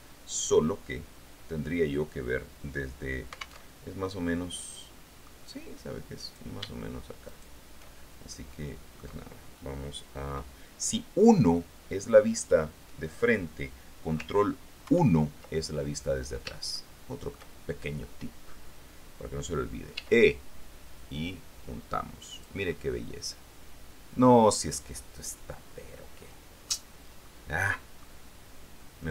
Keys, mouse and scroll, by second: 3.8 alt+Tab, 4.4-5.6 drag, 6.4 middle click, 7.4 shift+middle click, 8.6 middle click, 15.0 ctrl+1, 16.9-18.2 shift+middle drag, 20.1 e, 22.5 click, 22.8-24.0 middle drag, 24.0-27.0 drag, 27.8 click.